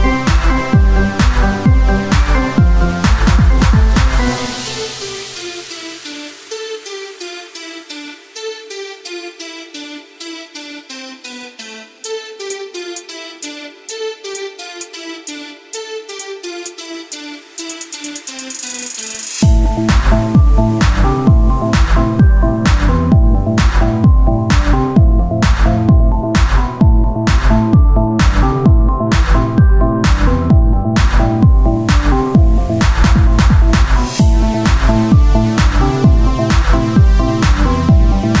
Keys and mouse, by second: 2.4-3.5 drag, 3.5 KP_1, 3.8 z, 4.8 r, 6.4-9.2 drag, 9.2 z, 11.0-16.2 drag, 12.5 middle click, 12.5 right click, 16.2 ctrl+Tab, 17.0-18.0 drag, 18.0 x, 19.0 ctrl+Tab, 21.3 click, 22.1 w, 24.1 click, 24.4 Tab, 28.9-33.5 drag, 29.1 z, 29.4 c, 30.7 o, 31.1 z, 32.2 Tab, 36.3 z, 36.6 c, 37.3 z, 37.6-38.4 drag.